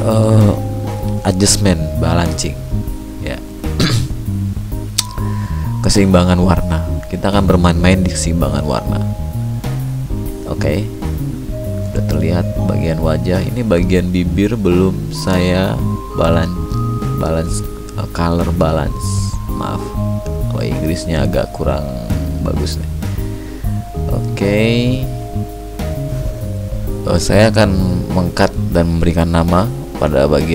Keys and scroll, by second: 12.1 ctrl+d, 23.6 ctrl+d.